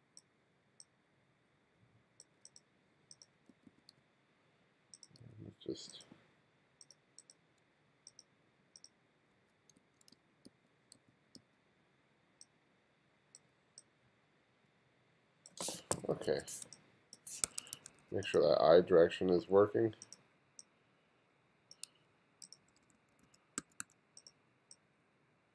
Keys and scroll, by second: 3.4 b, 5.1 b, 8.9-10.5 typing, 16.0 1, 16.5 space, 17.4 2, 22.6 2.